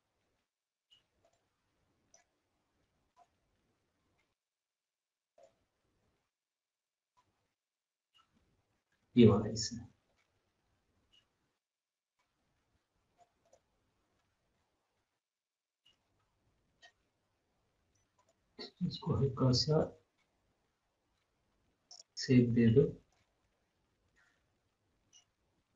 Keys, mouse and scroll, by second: 2.5 scroll, 2.5 scroll up 1, 2.6 scroll down 1, 3.1 scroll up 1, 4.1 scroll, 5.0 scroll down 1, 5.4 click, 6.2 scroll up 1, 7.0-7.4 scroll down 1, 7.4 scroll up 1, 7.6 scroll down 1, 10.1-13.4 drag, 13.9 scroll up 1, 14.1 scroll down 1, 15.2 scroll up 1, 15.2 scroll down 1, 15.4 scroll up 1, 16.6 scroll down 1, 16.9 scroll up 1, 18.4 click, 22.0 click, 23.6 scroll up 1, 24.9 scroll, 25.1 scroll down 1.